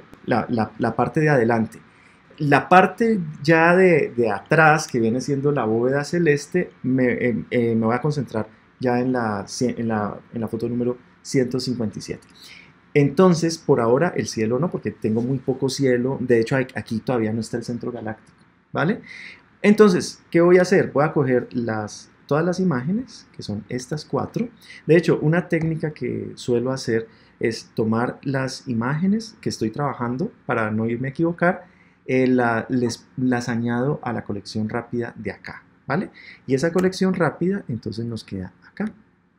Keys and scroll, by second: 36.7 Tab.